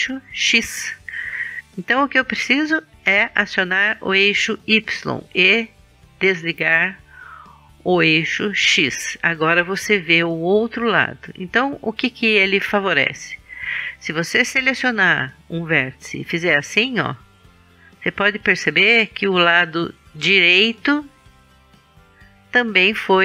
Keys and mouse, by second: 2.2-4.2 middle drag, 5.1-7.0 middle drag, 15.2 click, 15.8 right click, 22.3-23.2 drag.